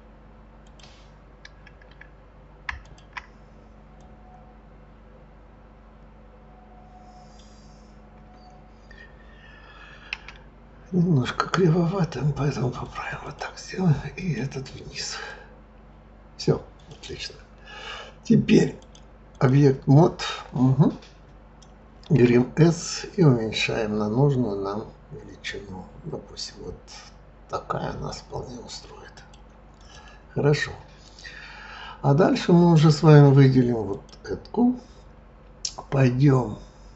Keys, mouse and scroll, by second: 2.8 shift+click, 4.0 click, 10.1 s, 13.2 click, 14.2 click, 15.3 click, 16.8 click, 18.7-21.8 drag, 22.2 s, 29.8 click, 33.9 click.